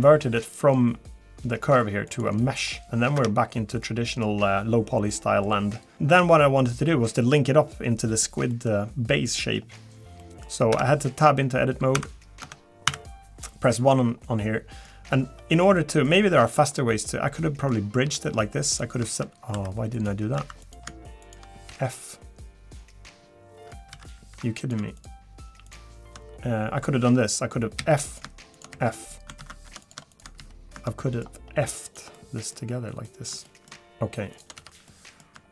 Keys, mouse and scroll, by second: 3.1 Tab, 3.8 middle click, 4.7 scroll down 2, 5.1 middle click, 5.9 middle click, 5.9 scroll up 3, 5.9 shift+middle click, 6.1 shift+middle click, 6.3 middle click, 8.5 middle click, 8.7 shift+middle click, 10.7 Tab, 10.7 middle click, 11.1-11.9 scroll up 2, 11.9 1, 12.4 Tab, 12.9 1, 14.2 middle click, 15.7 middle click, 18.0 middle click, 18.0 f, 18.7 click, 19.5 3, 19.9 click, 20.4 2, 20.6 click, 21.2 shift+click, 21.7 f, 23.9 ctrl+z, 24.6 click, 25.0 shift+click, 26.1 shift+click, 26.6 scroll down 1, 27.3 middle click, 27.8 f, 28.1 click, 28.5 click, 28.7 f, 28.9 middle click, 29.4 ctrl+z, 29.8 click, 30.1 shift+click, 30.4 f, 30.8 shift+middle click, 31.0 middle click, 31.8 click, 32.1 middle click, 33.3 shift+middle click, 33.4 shift+middle click, 33.9 click, 33.9 shift+a, 34.3 shift+click, 34.6 f, 34.9 middle click.